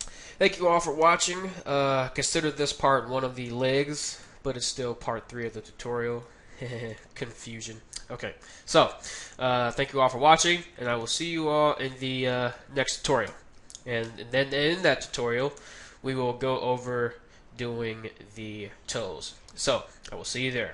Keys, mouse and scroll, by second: 0.8-3.0 middle drag, 3.5-6.8 middle drag, 6.1-8.5 right drag, 7.0-8.5 middle drag, 7.8-9.5 drag, 9.1-10.9 middle drag, 11.3-12.6 middle drag, 13.3 KP_1, 14.5-15.1 scroll down 1, 15.6 Tab, 16.8-19.0 middle drag.